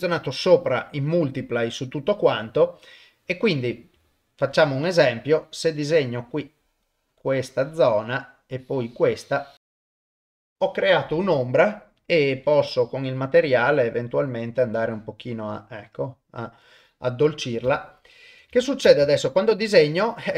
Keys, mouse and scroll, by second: 4.0 shift+middle click, 5.3-8.0 drag, 8.5-10.4 drag, 12.5 click, 17.7 ctrl+middle click, 18.9 shift+space.